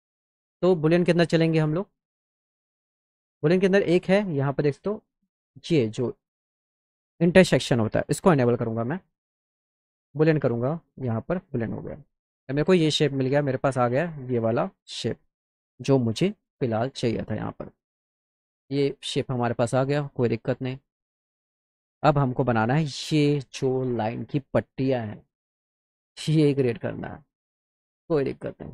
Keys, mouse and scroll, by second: 0.3 click, 2.5-3.2 drag, 4.5 click, 7.9 click, 10.0 click, 11.0 click, 12.0 click, 16.0 middle click, 17.3-17.7 middle drag, 18.7 right click, 27.7 click.